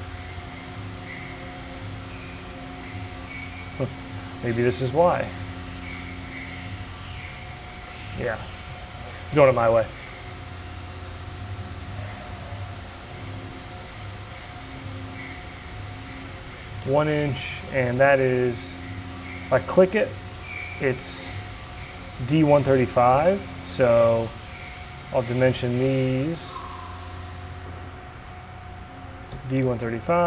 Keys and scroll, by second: 9.1 Escape, 9.8 c, 14.2 d, 16.8 Return, 22.2 Return, 23.9 d, 29.7 Return.